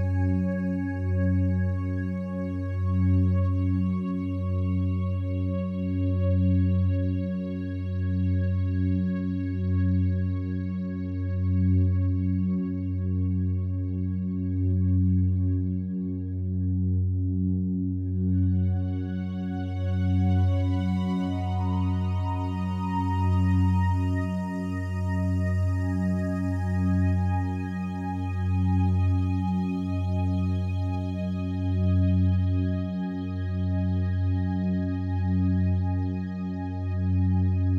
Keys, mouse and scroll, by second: 0.2 click, 2.5 click, 2.8 click, 4.1-6.0 drag, 6.4-10.7 ctrl+alt+drag, 10.7 typing, 12.5 typing, 13.7-15.9 drag, 15.9 typing, 18.4-27.9 drag, 20.4 typing, 27.9 typing, 30.3 typing, 32.1-34.8 drag, 35.1 e, 37.1-37.7 drag.